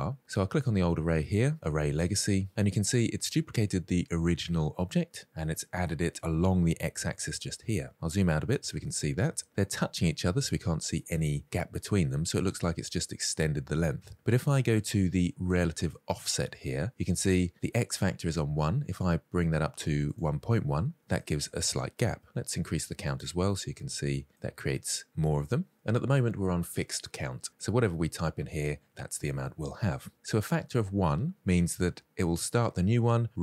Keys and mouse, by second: 8.2 middle drag, 8.6 shift+middle drag, 19.6 click, 21.0 middle drag, 22.6 click, 23.3-23.7 shift+middle drag, 24.4 click.